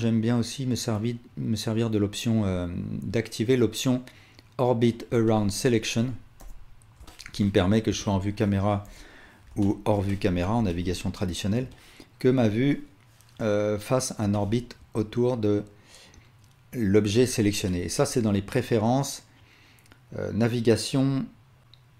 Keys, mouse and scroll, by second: 6.4-6.9 drag, 6.4 KP_0, 7.4-7.9 alt+drag, 8.9 KP_5, 9.5-10.5 alt+shift+drag, 10.7-15.5 alt+drag, 17.0-21.9 alt+drag.